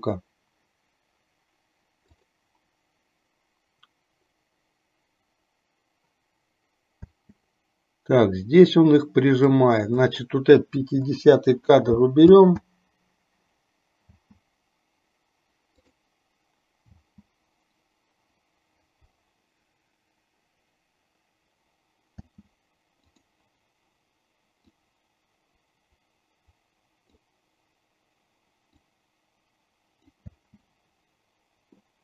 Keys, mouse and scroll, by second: 2.4 click, 7.4 space, 9.6 click, 11.0 Delete, 12.4 space, 16.1 click, 16.1 space, 22.5 space, 23.2 click, 25.0-27.4 drag, 29.0-30.5 drag, 30.5 space.